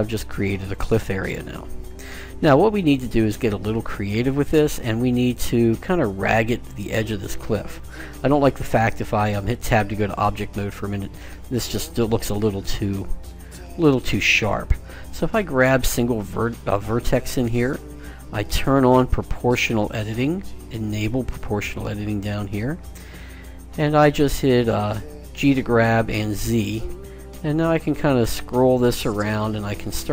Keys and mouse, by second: 1.0-8.6 middle drag, 10.0 Tab, 12.8 Tab, 16.0-17.5 right drag, 19.1-20.7 drag, 20.7 middle click, 25.6 g.